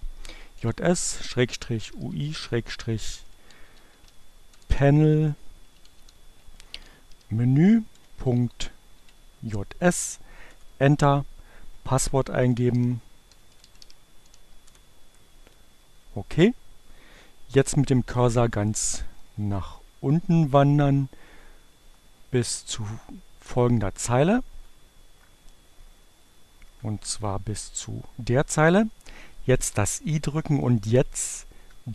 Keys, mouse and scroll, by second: 0.4-4.0 typing, 5.2-8.9 typing, 10.7-11.6 typing, 13.1-13.9 typing, 16.1 Page_Down, 19.7 Page_Up, 22.0 Down, 23.0 Up, 23.8 Right, 26.6 Down, 28.7 i, 29.8 Right.